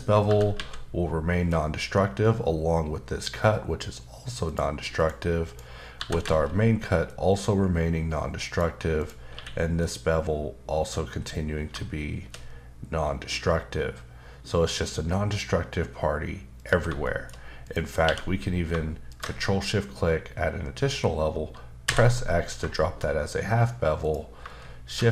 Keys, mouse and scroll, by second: 0.3 typing, 4.5 click, 4.9 click, 5.5 click, 6.0 typing, 8.4 click, 9.0 click, 9.3 q, 9.8 click, 12.0-12.4 shift+scroll down 2, 16.6 click, 17.0 shift+middle click, 17.6 click, 18.0 q, 19.1 ctrl+shift+click, 21.9 x, 22.7 shift+middle click, 24.0 click, 24.8 shift+d.